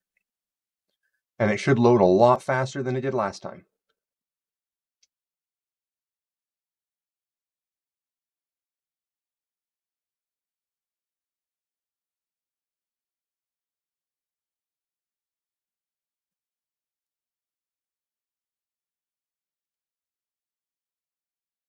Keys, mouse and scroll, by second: 1.8 click, 19.6 click, 20.7 click.